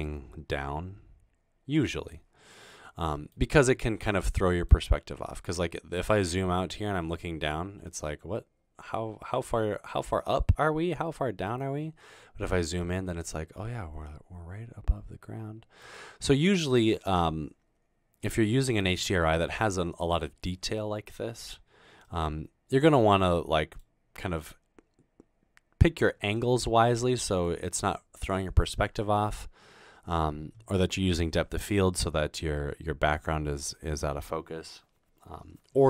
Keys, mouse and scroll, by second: 4.2 middle click, 5.3-7.0 scroll down 2, 7.0-7.6 scroll up 2, 7.6-8.2 scroll up 1, 8.2-11.5 middle drag, 12.4-13.1 scroll down 1, 13.1 middle click, 13.9 click.